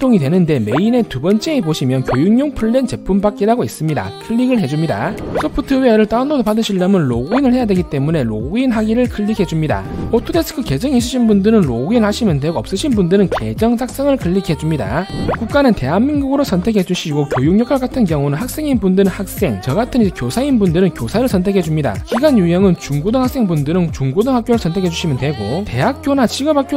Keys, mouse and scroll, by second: 7.8 click, 14.1 click, 16.2 click, 17.4 click.